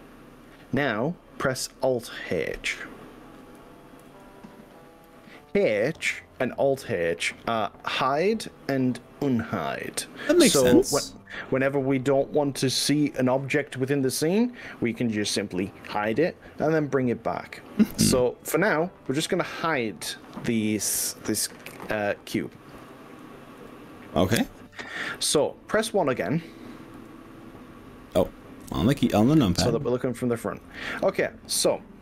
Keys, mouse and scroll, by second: 4.0 alt+h, 20.2 click, 22.8 alt+h, 23.6 h, 25.8 click, 27.0 1, 28.7 KP_1, 30.6 click.